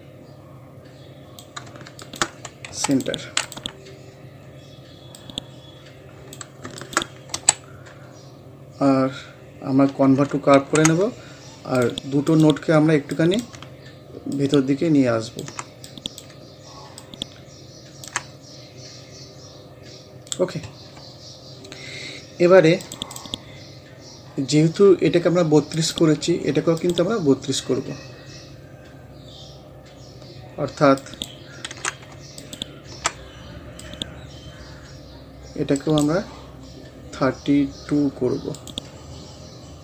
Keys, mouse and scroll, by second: 2.7 c, 3.0 click, 4.0 scroll up 1, 5.2-6.8 drag, 7.4 c, 7.6-8.0 scroll down 1, 9.7-10.6 scroll up 2, 10.6 ctrl+q, 11.8-18.7 drag, 18.7 scroll down 1, 22.8 click, 23.9 scroll up 1, 25.8 click, 27.7 scroll down 1, 29.2-29.7 scroll up 1, 31.0 click, 31.7 ctrl+z, 32.4-35.8 alt+drag, 35.8 right click, 38.6 click.